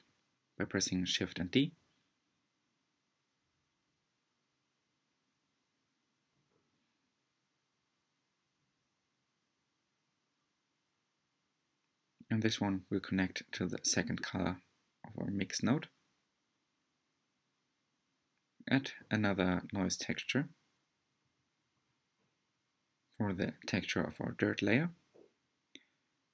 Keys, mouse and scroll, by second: 13.2 click, 14.9 click, 15.4 shift+a.